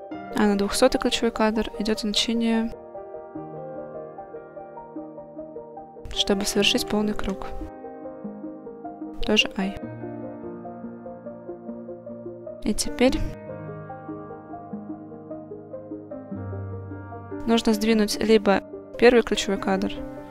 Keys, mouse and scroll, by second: 2.0-5.3 drag, 5.8-9.3 drag, 11.4 click, 14.7-15.9 middle drag, 17.0 click, 18.3 click.